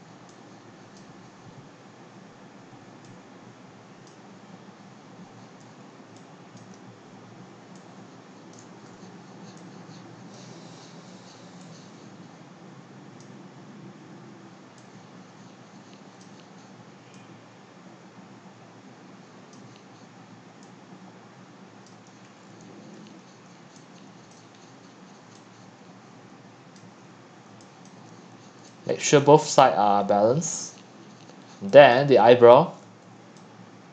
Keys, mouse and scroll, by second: 4.5-5.5 middle drag, 5.5 scroll up 2, 5.8 click, 6.1-27.5 typing, 6.6 click, 8.5 click, 10.3-22.3 drag, 22.3-23.0 scroll down 5, 23.0-23.6 scroll up 4, 24.3 drag, 24.6 scroll down 1, 24.7 scroll down 1, 24.7-25.3 scroll down 1, 27.9-28.6 drag, 28.6 x, 29.1 x, 29.2 click, 29.4-31.6 scroll up 8, 31.6 x, 31.9 click, 32.8 q.